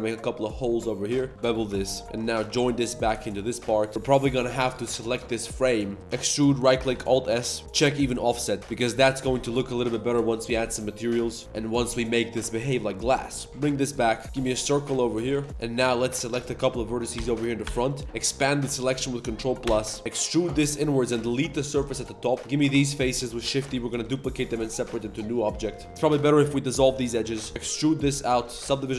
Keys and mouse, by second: 1.1-4.0 typing, 1.3 ctrl+shift+b, 1.6 Tab, 1.8 click, 2.1 ctrl+j, 2.4 Tab, 3.0 click, 3.4 click, 5.7 click, 6.1 e, 6.9 alt+s, 8.6 Tab, 8.6-11.8 typing, 8.8 click, 9.0 Tab, 10.1 Tab, 10.7 middle click, 11.3 click, 11.8 middle click, 13.5-15.3 typing, 14.1 shift+click, 16.0 shift+click, 16.6 ctrl+KP_Add, 17.2 ctrl+KP_Add, 17.6 ctrl+KP_Add, 19.6 ctrl+KP_Add, 20.0 3, 20.0 e, 20.9 3, 21.2 click, 21.7 ctrl+click, 21.9-24.4 typing, 22.5 ctrl+click, 23.9 Tab, 24.0 click, 25.5 Tab, 25.7-27.7 typing, 28.4 Tab, 28.6 ctrl+1, 28.9 ctrl+2.